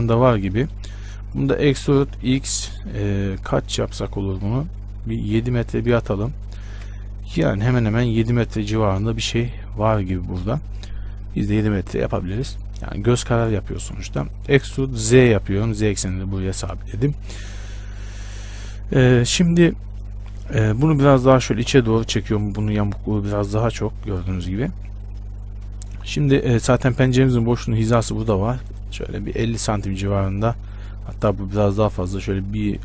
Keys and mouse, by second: 1.8 e, 14.7 e, 19.2 KP_1, 21.3-25.8 drag, 28.6 ctrl+r.